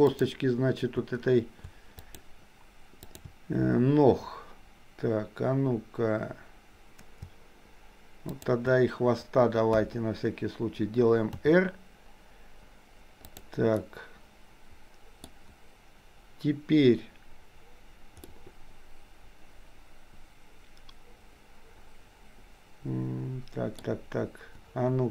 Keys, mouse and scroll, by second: 2.1 shift+click, 8.4 shift+click, 9.9 KP_1, 11.4 r, 13.9-15.4 middle drag, 18.4-24.0 middle drag.